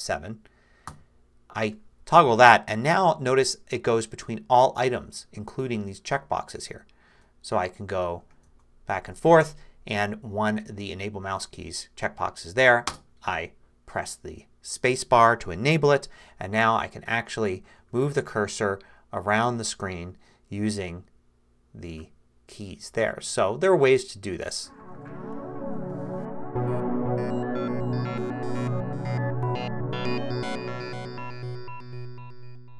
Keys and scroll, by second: 0.9 ctrl+F7, 2.8 Tab, 6.6 Tab, 8.4 shift+Tab, 12.9 space, 16.2 8, 18.5-20.2 typing, 21.5 4, 24.3 2.